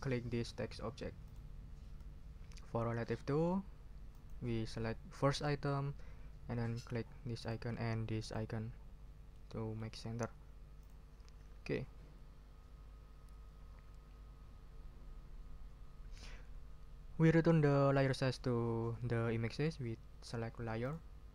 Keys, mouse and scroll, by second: 1.2 shift+click, 4.1 click, 5.3 click, 7.4 click, 8.2 click, 9.3 click, 10.8 click, 20.8 click.